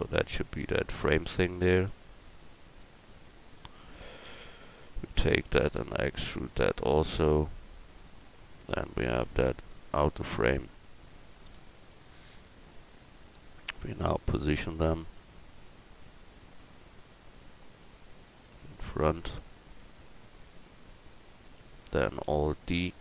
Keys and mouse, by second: 1.7 a, 1.9 a, 2.6 a, 4.2 l, 5.7 e, 6.7-8.6 drag, 8.9 Tab, 10.2 Tab, 11.5 l, 13.5-14.6 drag, 17.7-20.6 middle drag, 22.3 alt+d, 22.4-23.0 drag.